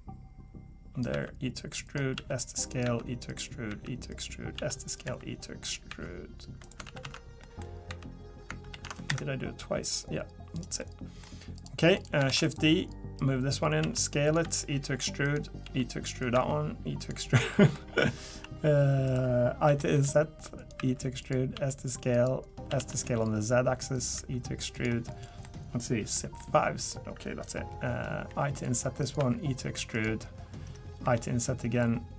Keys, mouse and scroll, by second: 1.1 e, 2.1-5.9 typing, 6.9 ctrl+z, 7.0 ctrl+z, 7.4 middle click, 7.9 e, 9.6 click, 10.8 middle click, 11.6 click, 11.9 click, 12.3 shift+d, 13.2 click, 13.8 s, 14.4 e, 15.6 s, 16.3 e, 17.5 middle click, 18.3 s, 19.7 i, 20.8 e, 21.5 s, 22.7 s, 24.1 e, 25.1 middle click, 25.7-26.1 scroll up 1, 26.1 middle click, 28.3 i, 29.2 e, 31.0 i.